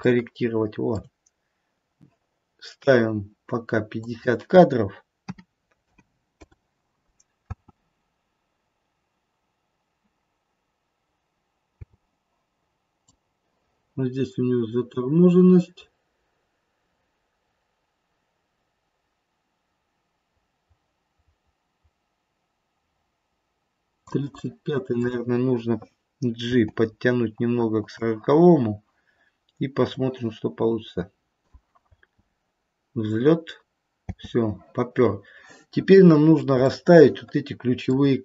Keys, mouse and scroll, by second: 0.2 shift+middle click, 0.8 shift+middle click, 7.4 space, 11.7 space, 13.2 click, 24.2 click, 26.4 g, 29.8 click, 31.9 space, 34.1 space, 36.1-36.5 scroll down 3, 36.7 shift+middle click.